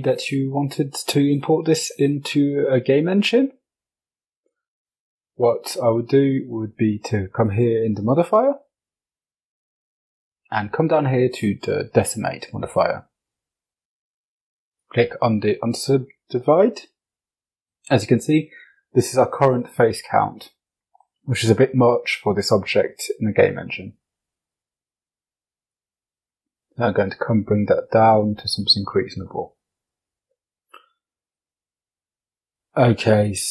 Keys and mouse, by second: 1.5-2.4 middle drag, 4.7-11.5 drag, 13.4 click, 21.7-22.6 middle drag, 23.7 click, 24.5 click, 25.9 click, 27.9 click.